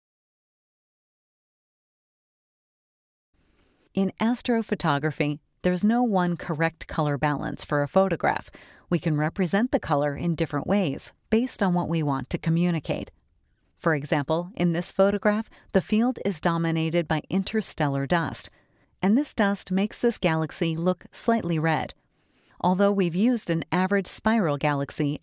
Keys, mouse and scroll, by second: 0.1 click, 2.7 middle click, 2.8-3.5 scroll up 2, 3.2 middle click, 3.8 middle click, 3.9 scroll up 1, 4.3 scroll down 1, 4.3 scroll up 2, 21.0 click.